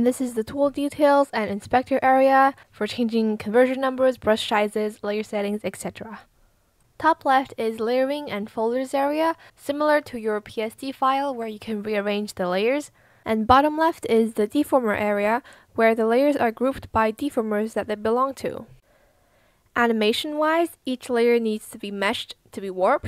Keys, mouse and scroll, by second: 18.3 ctrl+z, 22.2 ctrl+z, 22.9 ctrl+z.